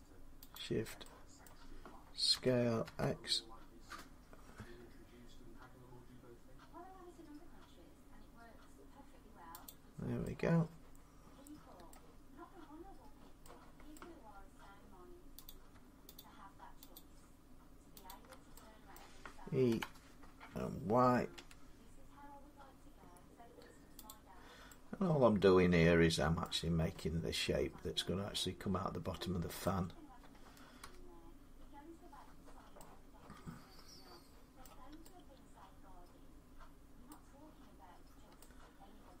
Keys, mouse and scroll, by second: 0.4 shift+click, 1.3 middle click, 2.2-2.7 typing, 3.9-5.0 scroll, 3.9 s, 9.5 click, 11.7 middle click, 13.8 middle click, 14.2 scroll down 3, 16.0 shift+click, 16.8 click, 16.8 scroll up 3, 18.0 click, 18.8 middle click, 19.5 e, 21.2 y, 23.8 middle click, 23.9-26.1 drag, 26.3 middle click, 26.4-26.8 scroll down 4, 29.4 middle click, 30.6 1, 33.2-39.2 middle drag, 37.7 scroll, 38.0-39.2 scroll up 3.